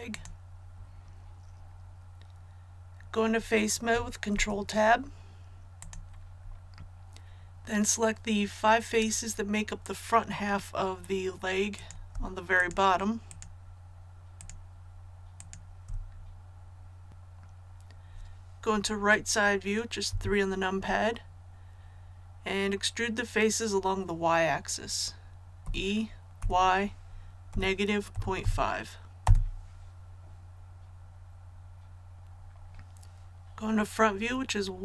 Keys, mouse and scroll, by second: 4.3 Tab, 5.8 click, 11.7 right click, 12.6 shift+right click, 13.3 shift+right click, 14.4 shift+right click, 15.3 shift+right click, 20.1 KP_3, 25.6-26.4 typing, 28.1 KP_Decimal, 28.4 KP_5, 29.2 Return, 32.1 click.